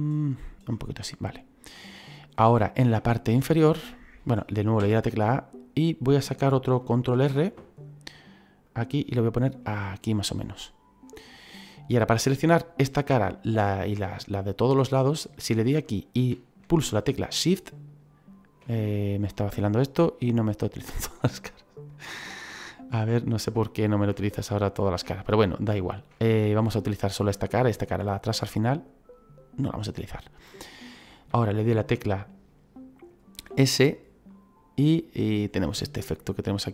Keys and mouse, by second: 1.0 middle click, 2.4 shift+middle click, 3.3 right click, 4.7 a, 5.3 middle click, 7.0 ctrl+r, 8.6 click, 10.0 click, 15.5 click, 17.6 shift+right click, 18.5 middle click, 19.3 shift+right click, 19.9 middle click, 21.1 middle click, 21.8 right click, 22.5 shift+right click, 24.1 shift+right click, 25.8 shift+right click, 26.1 middle click, 27.7 shift+right click, 28.0 middle click, 30.6 middle click, 33.3 s.